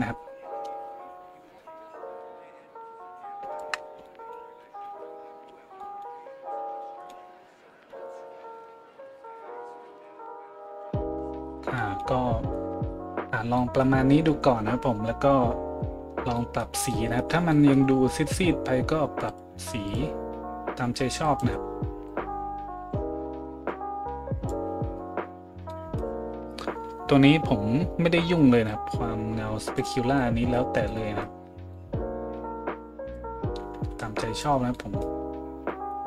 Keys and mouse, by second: 20.0-28.8 middle drag, 28.8-36.0 drag.